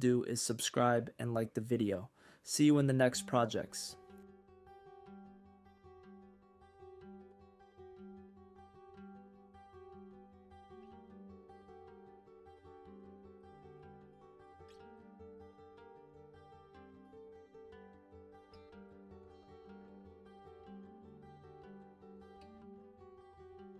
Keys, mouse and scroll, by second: 3.5-12.9 drag, 14.1 click, 16.5 click, 17.1-19.2 drag, 20.3 click, 21.9-23.7 drag.